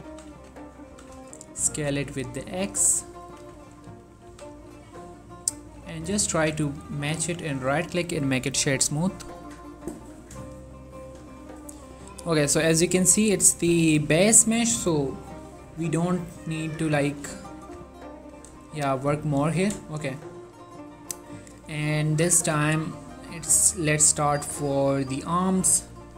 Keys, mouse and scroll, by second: 0.2 s, 0.4 z, 0.9 click, 1.0 s, 1.2 x, 3.2 click, 3.4 g, 3.7 z, 4.3 click, 4.4 s, 4.7 z, 5.5 click, 5.7 z, 6.5 ctrl+a, 6.7 click, 7.2 right click, 7.5 click, 15.7 scroll down 1, 16.2-16.7 scroll up 1, 16.7-17.2 scroll down 1, 17.2 click, 17.6 shift+middle click, 20.7 click.